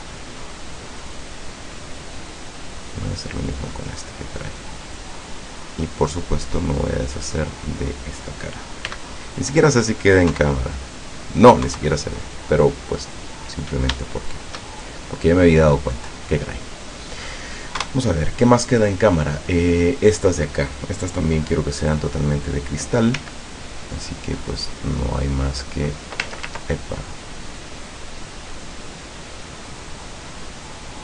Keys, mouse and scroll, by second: 2.9 right click, 3.9-5.7 drag, 6.8 click, 7.6 right click, 8.9 x, 9.3 click, 10.3 KP_0, 11.6 KP_0, 12.8-13.1 scroll up 2, 13.4 scroll down 2, 14.2 shift+middle click, 14.5 shift+middle click, 15.5 scroll up 2, 16.6 scroll down 2, 17.8 KP_0, 23.2 c, 24.0 click, 25.2 click, 27.6 middle click, 29.8 middle click, 30.7 click.